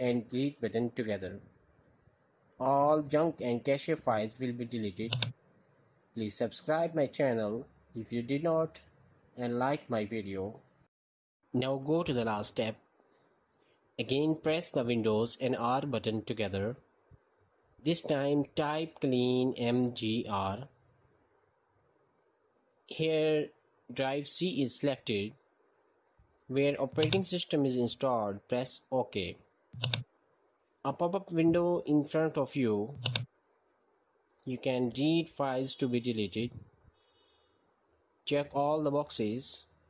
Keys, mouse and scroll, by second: 0.3 Delete, 4.9 click, 16.7 super+r, 18.3 BackSpace, 19.8-23.7 typing, 26.8 click, 29.6 click, 30.1 click.